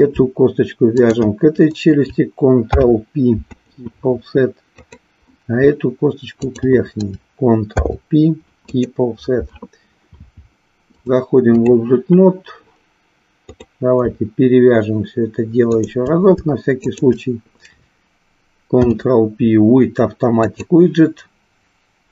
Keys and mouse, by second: 1.0 shift+click, 2.6 ctrl+p, 4.8 click, 6.4 shift+click, 7.7 ctrl+p, 11.1 click, 13.4 click, 16.8 shift+click, 18.7 ctrl+p.